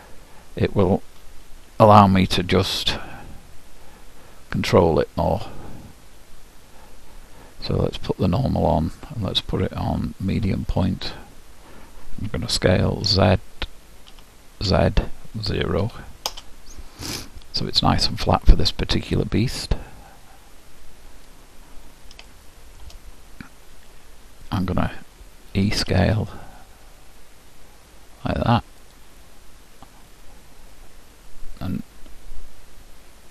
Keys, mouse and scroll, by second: 8.3-10.8 drag, 13.2 s, 19.4-21.3 drag, 22.3-24.2 middle drag, 25.6 e.